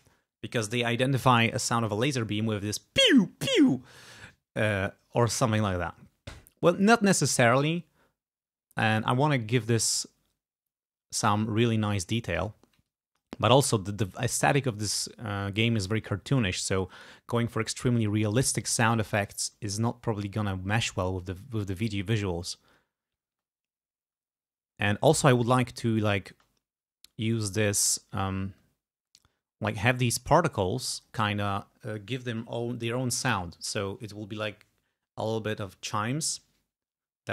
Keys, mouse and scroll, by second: 12.9 click, 21.2 space, 23.3 space, 26.3 space, 27.4 click, 27.7 space, 28.9 space, 30.6 click.